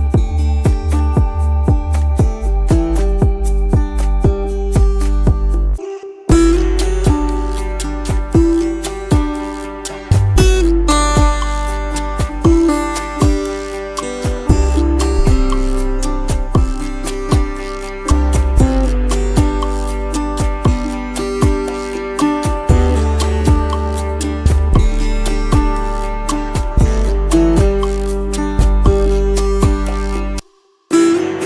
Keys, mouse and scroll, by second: 1.1 shift+click, 2.7 space, 18.8 space, 19.5 t, 20.3 End, 20.5 Delete, 20.9 space, 23.0 Return, 24.3 End, 24.5 Delete, 24.8 space, 26.8 Return.